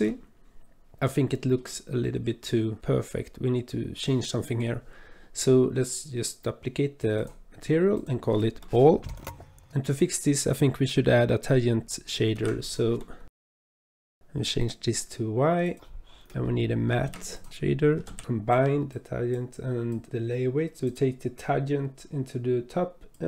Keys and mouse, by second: 1.4 shift+drag, 7.2 click, 8.0-9.2 drag, 9.2 l, 9.6 click, 9.7 shift+a, 12.3 shift+a, 15.7 click, 16.2 click, 17.0 shift+a, 20.7 click, 20.7 click, 21.4 click, 22.4-23.2 drag.